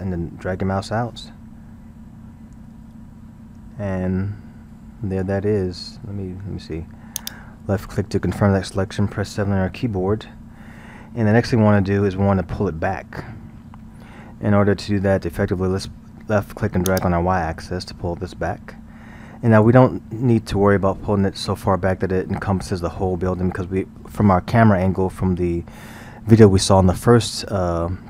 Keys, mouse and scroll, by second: 7.6-8.3 scroll, 9.5 KP_7, 10.1-13.7 scroll, 14.8-16.9 scroll, 16.9-19.9 drag, 20.9-24.3 scroll.